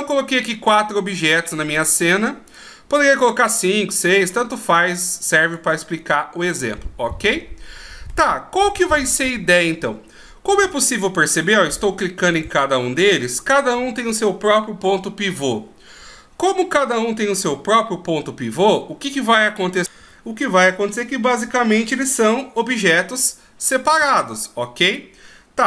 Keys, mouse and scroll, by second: 1.5 click, 2.5 right click, 3.5 click, 4.7 click, 6.5 middle click, 8.5-9.7 scroll down 1, 11.2 right click, 12.3 right click, 13.2 right click.